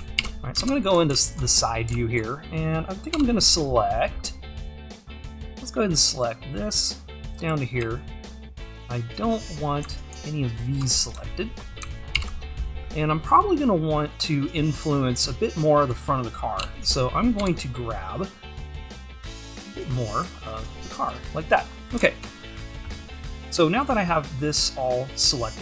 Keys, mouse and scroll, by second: 0.0 scroll up 1, 0.2 ctrl+KP_3, 1.1 alt+z, 1.5-1.9 scroll up 1, 3.1 shift+`, 5.6 c, 7.8 `, 10.6 alt+shift+click, 11.2 `, 12.2 ctrl+KP_3, 12.8-14.6 scroll up 1, 21.0 c, 21.6-25.6 scroll down 1.